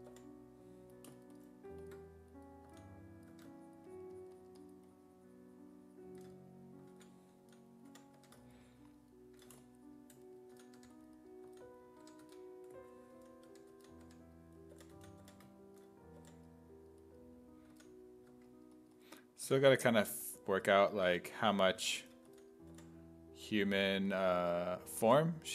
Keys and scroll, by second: 0.0-0.6 typing, 2.7 s, 3.3 1, 7.2-8.7 typing, 10.3-16.2 typing, 17.7 s, 18.3 1, 19.5 s, 21.1 1, 22.3 s, 22.7 5, 25.1 5.